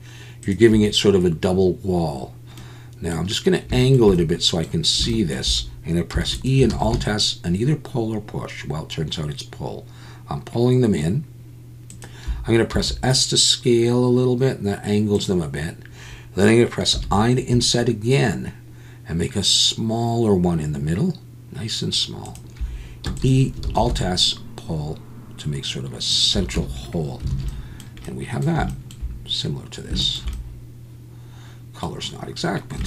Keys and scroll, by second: 6.3 e, 6.7 alt+s, 12.7 s, 23.2 e, 23.6 alt+s, 26.6 Tab, 27.3 alt+a.